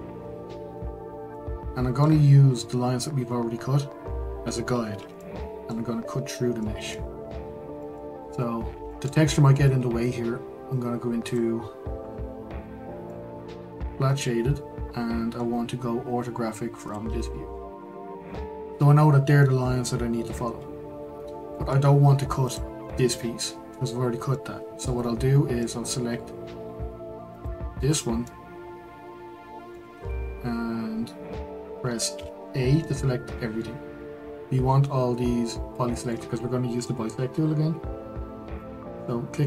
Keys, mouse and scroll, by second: 1.3-9.2 middle drag, 9.2-11.2 scroll, 11.2 click, 13.0-16.3 middle drag, 16.9 click, 21.5-22.5 middle drag, 22.5 click, 22.9-24.0 middle drag, 24.0-24.3 scroll, 24.3-27.4 middle drag, 27.4 click, 28.2-29.9 middle drag, 29.9 Tab, 32.1 a, 32.8-36.0 middle drag.